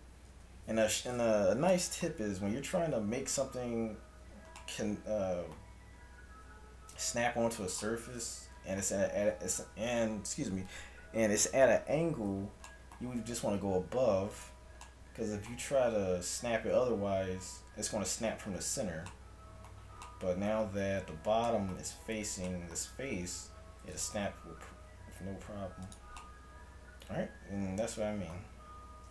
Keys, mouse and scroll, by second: 0.4 KP_1, 10.4-12.8 middle drag, 13.3 g, 24.0 g.